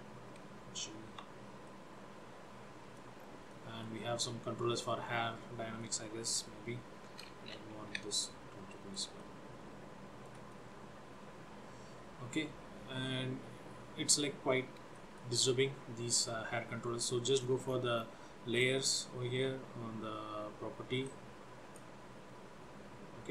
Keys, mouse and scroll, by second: 0.0 g, 1.7 middle click, 3.3 scroll down 2, 3.6 shift+middle click, 5.3-5.8 scroll down 3, 5.8 middle click, 7.9 t, 8.8 middle click, 9.2 shift+middle click, 10.6 middle click, 15.0 shift+middle click, 17.4-18.6 scroll down 10, 18.6 click, 21.1 click.